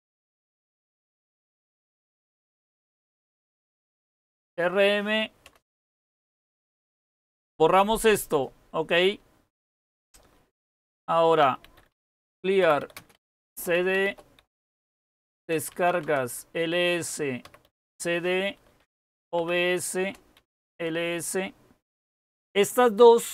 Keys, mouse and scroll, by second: 0.0-4.3 typing, 5.4-7.5 typing, 9.8-16.0 typing, 17.2-21.0 typing.